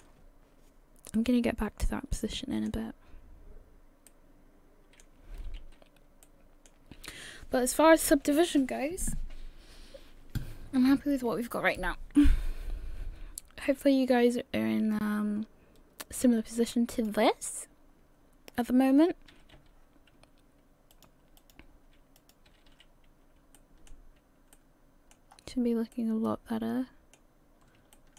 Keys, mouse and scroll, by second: 0.6-1.2 scroll down 1, 1.2 middle click, 3.0 scroll down 1, 3.1-3.7 scroll down 3, 4.1 middle click, 5.4 a, 5.6 a, 6.2 middle click, 16.9 click, 18.3-19.3 scroll down 2, 19.3 a, 19.5 a, 20.9 click, 22.2 click, 22.5 a, 22.7 a, 23.6 shift+middle click, 24.5 middle click, 25.3-25.9 scroll up 3, 25.9 middle click, 27.5 scroll up 1, 27.9 shift+middle click.